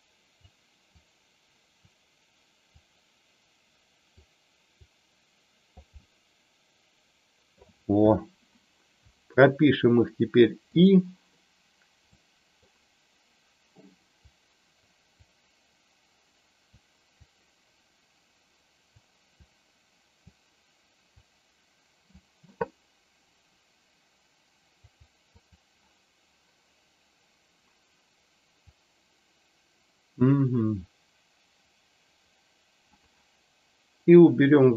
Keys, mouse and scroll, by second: 0.9 click, 2.8-4.1 drag, 4.6-5.8 drag, 5.9-7.5 middle drag, 10.7 click, 12.1 middle click, 14.2 click, 15.2-16.6 drag, 17.3-18.9 drag, 19.4 click, 21.1-22.2 drag, 24.8 click, 25.4 click, 28.6-32.9 drag, 34.2-34.7 drag.